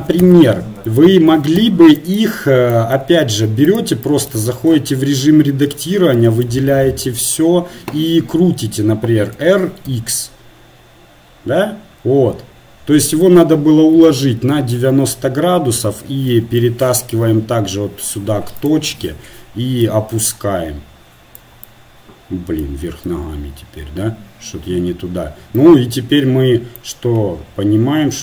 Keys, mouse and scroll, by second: 0.3-3.1 drag, 5.2 Tab, 6.2 a, 6.6 a, 9.4 r, 15.8 KP_7, 16.6-18.5 drag, 17.1 g, 18.9 KP_1, 19.9-23.3 drag, 23.3 Tab, 24.4 Tab.